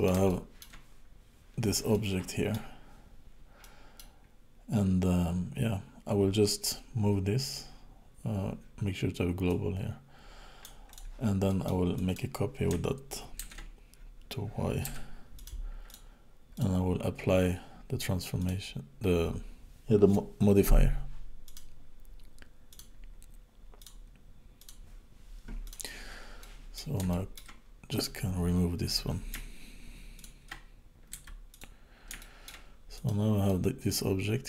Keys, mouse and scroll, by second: 0.3 shift+middle click, 1.0 scroll up 2, 1.9 middle click, 3.6 middle click, 4.2-4.8 scroll down 2, 4.8-5.3 scroll up 2, 5.7-6.4 scroll down 1, 6.4 click, 6.4 scroll down 1, 9.5 click, 10.9 click, 11.5 middle click, 12.0 click, 13.5 shift+d, 15.9 click, 16.5 click, 18.4 click, 21.5 click, 23.8 click, 25.6 click, 26.4 middle click, 27.1 shift+middle click, 27.9 click, 30.3 shift+click, 31.2 x, 32.2 shift+middle click, 32.9 click, 33.4 middle click.